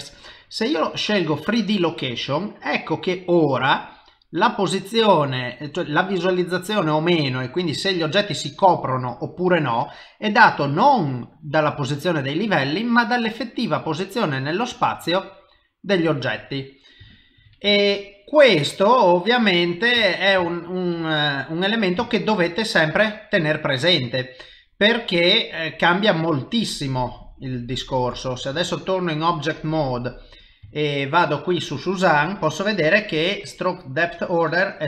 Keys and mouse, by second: 2.3 middle click, 10.7 middle click, 12.3 middle click, 17.1 ctrl+middle click, 17.5 shift+middle click, 18.0 middle click, 20.1 ctrl+middle click, 20.5 shift+middle click, 21.0 middle click, 22.1 shift+middle click, 22.6 middle click, 24.2 middle click, 25.1 s, 26.5 middle click, 28.5 ctrl+Tab, 30.4 click, 30.7 shift+middle click, 31.2 middle click.